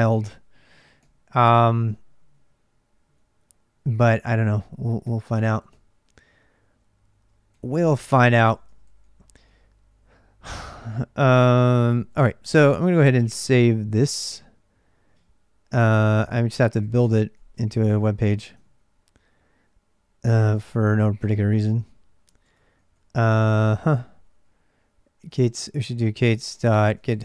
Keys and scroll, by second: 0.0-5.6 typing, 7.3-9.3 typing, 11.6-13.3 typing, 15.6-17.2 typing, 17.2 Return, 18.3 ctrl+[, 18.4 ctrl+j, 21.0-27.2 typing.